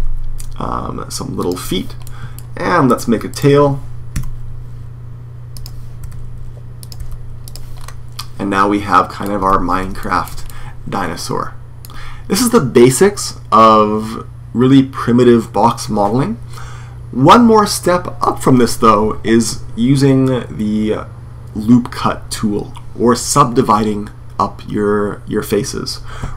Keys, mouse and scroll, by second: 1.8 click, 3.0 middle click, 3.8-4.9 right drag, 3.9 e, 4.9 middle click, 5.4-7.9 drag, 5.8 e, 6.8 e, 7.9 middle click, 9.2 Tab, 11.0-12.3 middle drag, 26.1 Tab.